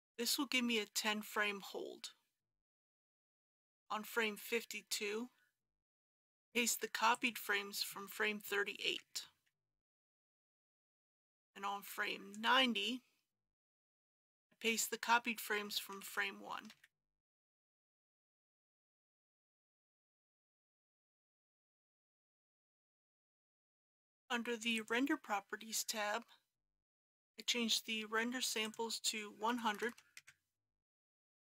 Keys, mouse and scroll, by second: 3.1-4.6 drag, 8.8 ctrl+c, 9.5 ctrl+v, 10.9-12.9 drag, 16.0 ctrl+c, 16.7 ctrl+v, 18.9-21.0 drag, 29.5 KP_1, 29.7 KP_0.